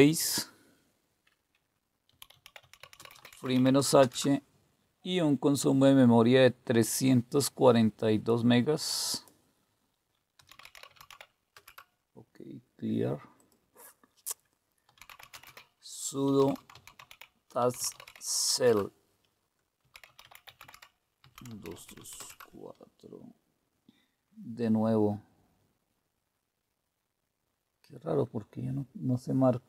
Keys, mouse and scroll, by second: 1.8-4.0 typing, 6.8-8.4 drag, 9.1 click, 10.1-11.6 typing, 13.4 click, 14.6-18.5 typing, 19.5-23.0 typing.